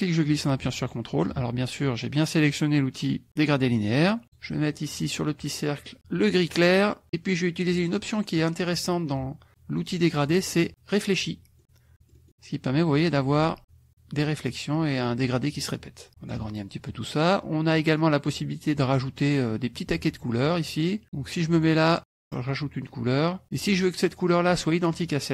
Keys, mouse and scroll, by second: 0.0-1.4 drag, 4.2 click, 6.6 click, 8.7 click, 10.3 click, 11.2 click, 11.6 click, 11.9 click, 13.1-16.5 drag, 21.7 click, 22.5 click.